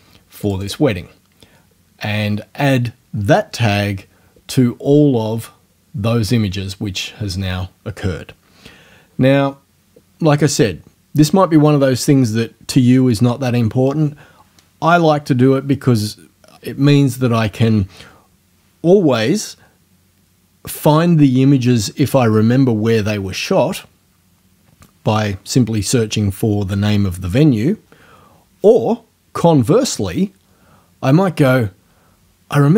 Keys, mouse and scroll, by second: 0.5 click.